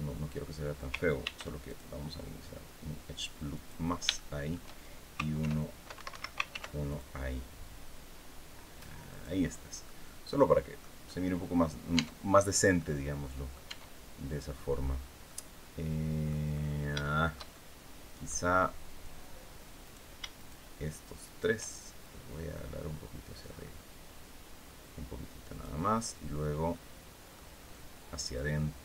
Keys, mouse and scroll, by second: 0.9 ctrl+r, 1.4 ctrl+click, 3.2 click, 3.8 shift+middle click, 5.1 ctrl+e, 5.6 ctrl+Escape, 6.2 ctrl+r, 6.5 ctrl+click, 8.8 click, 9.1 scroll down 2, 9.5-10.7 middle drag, 10.7 scroll up 2, 11.6 Tab, 12.0 scroll down 1, 12.5 click, 13.4 Tab, 14.9-16.1 drag, 16.2-16.6 scroll up 1, 16.7 shift+click, 16.7-18.1 shift+middle drag, 19.5 right click, 20.0 shift+right click, 20.9 shift+right click, 21.7 shift+click, 22.5-23.0 scroll up 2, 23.2-23.6 scroll up 1, 26.4 middle click, 28.0-28.8 drag.